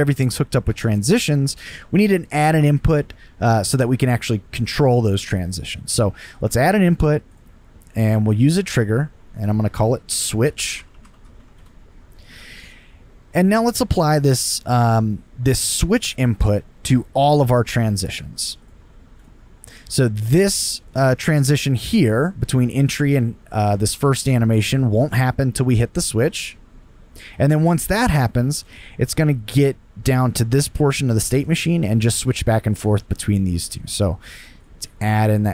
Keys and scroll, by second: 10.3-11.9 typing.